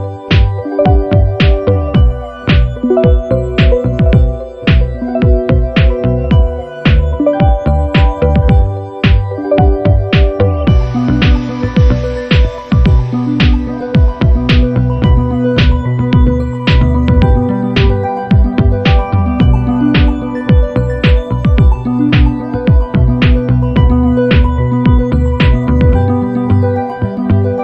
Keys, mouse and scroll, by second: 0.8-1.2 ctrl+scroll up 4, 2.1 click, 3.3 ctrl+shift+click, 4.9 click, 6.4 click, 7.1 click, 7.7 click, 8.8 KP_6, 9.1 KP_Enter, 11.1 click, 12.4 click, 13.4 shift+click, 14.7 click, 16.0 click, 16.9 click, 17.6 click, 20.5 ctrl+shift+click, 21.8 shift+click, 22.9 ctrl+scroll down 2, 25.1 click, 25.7 click, 26.7 ctrl+x, 27.3 click.